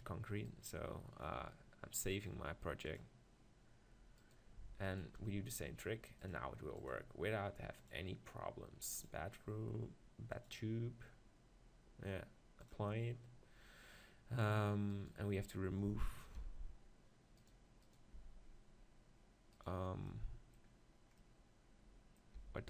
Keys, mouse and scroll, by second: 0.4-2.4 right drag, 2.3-3.8 drag, 4.2-7.0 right drag, 7.3-11.0 shift+drag, 12.8-14.5 drag, 14.9-16.8 right drag, 16.4 g, 17.8-19.6 right drag, 18.2 g, 20.1-21.7 middle drag, 22.4 g.